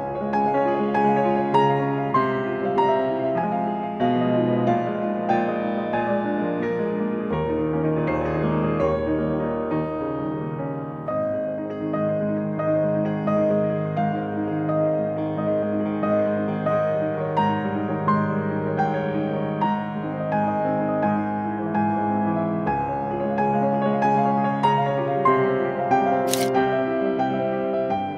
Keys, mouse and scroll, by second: 0.2 scroll down 1, 0.5-1.0 scroll up 1, 1.7-2.7 scroll down 1, 2.7-3.6 scroll up 1, 3.6-4.1 scroll down 1, 4.1 scroll up 2, 4.4 click, 5.4 scroll down 2, 6.3 scroll down 2, 6.4 scroll up 2, 6.5-7.3 scroll down 2, 8.0 scroll down 2, 8.1 scroll up 2, 8.3 scroll down 2, 8.4 scroll up 2, 10.8 Escape, 11.6 0, 11.9 Return, 13.8 scroll down 2, 14.1-14.9 scroll up 2, 14.9-15.5 scroll down 1, 15.5-15.8 scroll down 1, 15.8-16.7 scroll up 1.